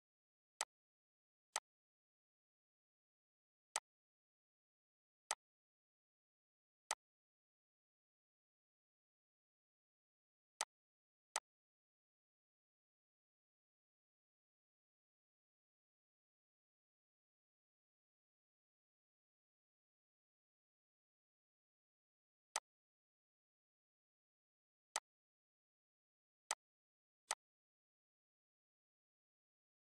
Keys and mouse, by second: 4.9-22.2 shift+drag, 22.2-24.6 drag, 24.6 right click, 26.2 click.